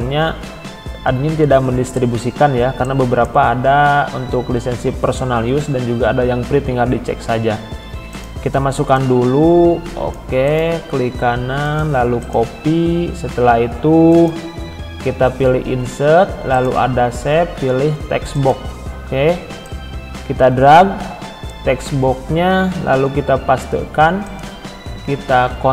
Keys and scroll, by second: 23.0 ctrl+v, 25.3 ctrl+a.